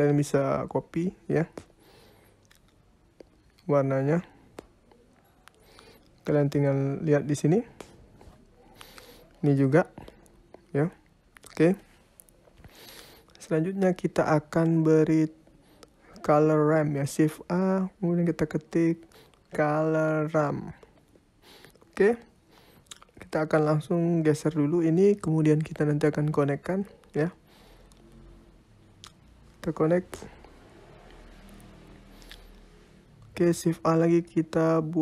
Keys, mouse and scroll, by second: 3.3-3.7 scroll up 4, 3.8 ctrl+z, 4.6 click, 8.4 click, 10.9 click, 11.5-11.8 scroll down 4, 11.8 middle click, 12.8-13.2 scroll down 2, 15.3 shift+a, 22.3 scroll down 5, 22.5 middle click, 23.3 click, 24.1 click, 25.3 click, 26.2-26.6 scroll up 5, 26.6 middle click, 27.1-27.5 scroll up 2, 27.5 click, 28.3 click, 30.5 middle click, 32.1 shift+a.